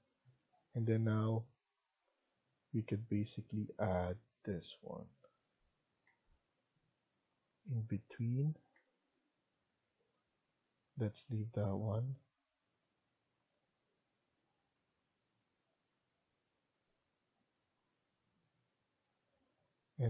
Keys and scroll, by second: 3.1 Escape, 5.9 Escape, 8.7 Escape, 13.4 Escape, 15.8 Escape, 18.7 Escape.